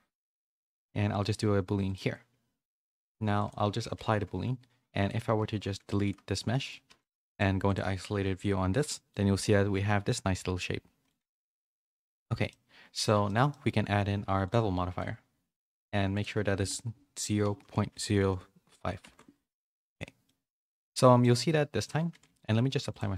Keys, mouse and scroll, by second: 3.3 click, 3.8 ctrl+a, 6.0 g, 6.8 x, 7.3-8.7 drag, 8.7 /, 9.1 middle click, 10.9 middle click, 11.2 Tab, 11.7 middle click, 12.4 Tab, 12.4 middle click, 13.2 shift+middle click, 13.4 middle click, 20.2 middle click, 20.7 a, 20.9 a, 21.0 middle click, 22.2 ctrl+a.